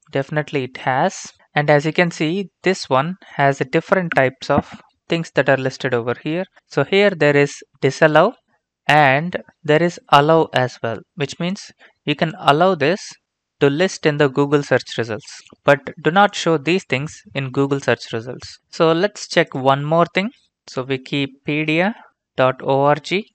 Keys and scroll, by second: 20.5-23.3 typing.